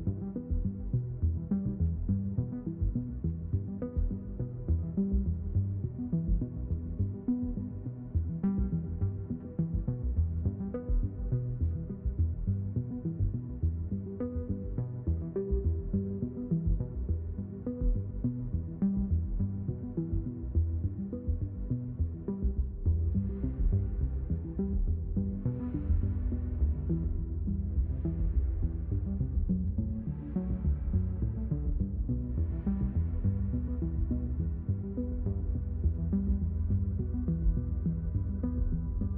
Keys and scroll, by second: 11.2 Return, 37.4 n.